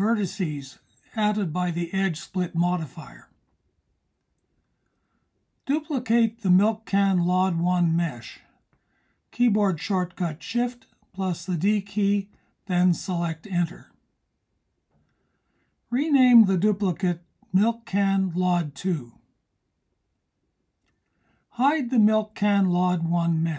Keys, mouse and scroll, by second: 7.1 click, 9.6 shift+d, 15.5 click, 15.9 click, 16.6 click, 16.8-22.1 drag, 18.5 BackSpace, 19.0 BackSpace.